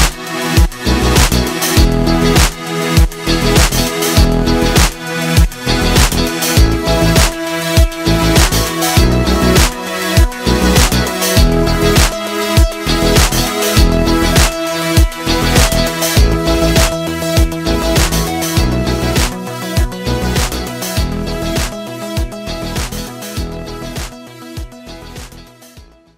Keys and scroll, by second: 0.6 v, 1.9 i, 2.5 v, 3.2 z, 3.3 space.